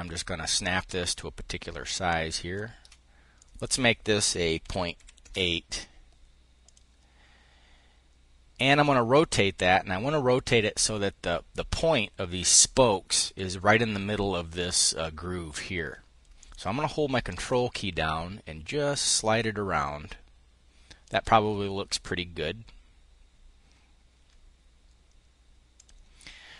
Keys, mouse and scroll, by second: 3.0 click, 4.3 ., 4.6 8, 4.9 Return, 6.3 click, 16.0 click, 16.9-21.3 ctrl+drag, 25.3 click.